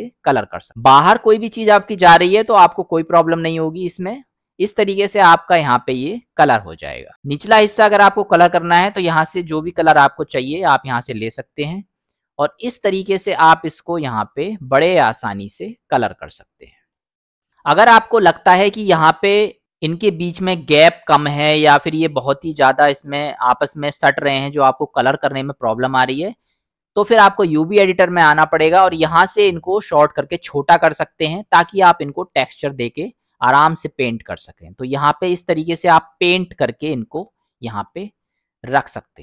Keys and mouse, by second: 2.5 middle click, 3.9 middle click, 7.2 middle click, 8.6 click, 12.3-23.6 drag, 28.8 middle click, 32.2 click, 33.3-37.9 drag, 38.6 middle click.